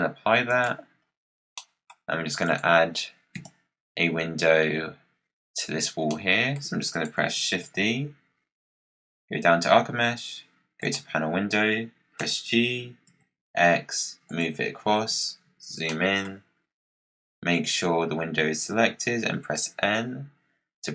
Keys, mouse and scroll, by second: 1.0-1.5 scroll down 5, 1.5 middle click, 2.3 click, 3.3 KP_Decimal, 6.0-6.8 middle drag, 6.8 click, 7.4 shift+a, 12.1 g, 14.9 KP_Decimal, 15.8-18.9 middle drag, 19.1 n.